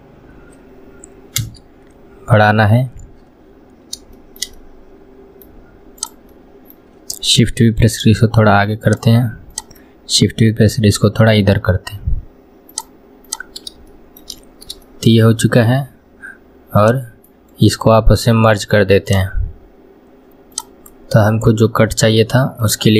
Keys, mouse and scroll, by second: 4.2-6.0 shift+middle drag, 6.0 click, 6.3-7.8 middle drag, 7.8 shift+v, 9.5 click, 10.7 shift+v, 13.3 click, 13.9 shift+middle click, 14.4 scroll up 2, 14.9-16.9 shift+middle drag, 16.9 click, 17.6-19.9 right drag, 19.9 scroll down 2, 20.6 click, 20.9-22.9 middle drag.